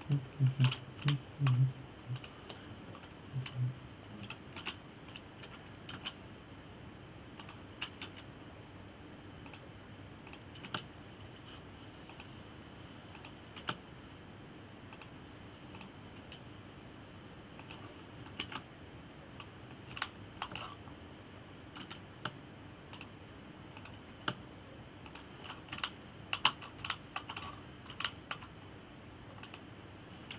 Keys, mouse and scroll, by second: 2.8-3.9 shift+middle drag, 3.9 click, 6.3 l, 7.6 r, 9.7 g, 11.2 click, 11.9 click, 12.3 g, 14.8 click, 15.3 g, 17.4 click, 17.9 g, 20.1 ctrl+KP_7, 21.7 shift+middle click, 22.3-23.5 scroll up 2, 23.5 g, 25.4 click, 25.8 g, 27.2-27.5 scroll down 2, 27.5 shift+middle click, 28.4 scroll down 2, 28.6 shift+middle click, 29.1-29.7 scroll up 3, 29.7-30.3 shift+middle drag.